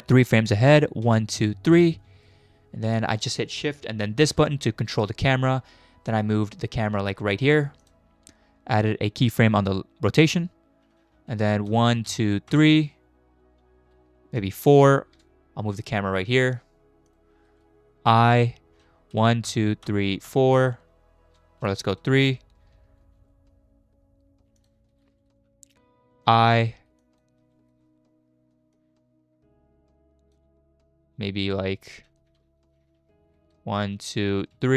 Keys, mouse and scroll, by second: 1.1 Right, 1.4 Right, 1.7 Right, 4.2 shift+`, 10.3 i, 11.7 Right, 12.1 Right, 12.5 Right, 14.6 Right, 15.5 shift+`, 18.1 i, 19.1 Right, 19.5 Right, 19.9 Right, 20.3 Right, 22.0 Left, 23.0 shift+`, 26.2 i, 27.0 click, 27.4 space, 27.7 space, 28.8 click, 32.2 Left, 32.4 Left, 32.6 Left, 32.8 Left, 33.0 Left, 33.4 Right, 33.9 Right, 34.5 Right.